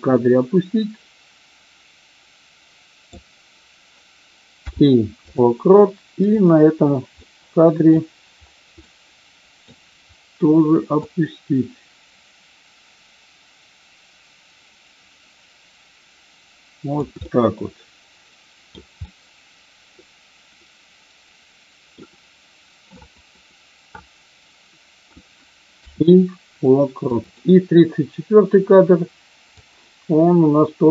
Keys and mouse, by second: 6.2 click, 7.2-7.7 middle drag, 8.7-9.6 middle drag, 11.1-17.0 drag, 17.2-18.6 middle drag, 18.8-22.0 middle drag, 22.8-25.1 drag, 27.2 click, 27.2 space, 29.5-30.9 drag.